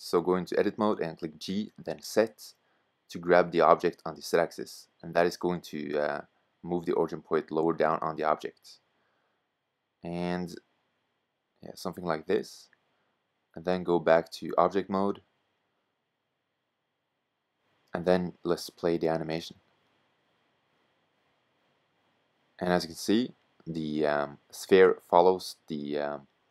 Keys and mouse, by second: 3.6-5.5 middle drag, 6.9 g, 10.0 click, 10.0 middle click, 10.2 click, 10.5-14.1 middle drag, 14.1 Tab, 14.6 middle click, 15.0 middle click, 19.7-21.5 drag, 23.1-26.5 middle drag.